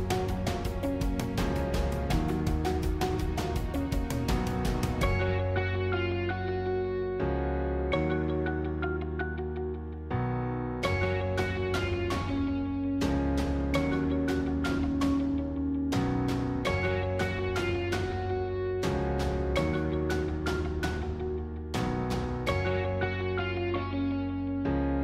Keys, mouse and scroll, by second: 1.5-1.8 scroll up 1, 1.8-4.8 middle drag, 5.5-5.9 scroll down 1, 5.9-8.2 middle drag, 8.2-9.6 scroll up 2, 11.3-14.1 drag, 14.1 shift+d, 15.7 s.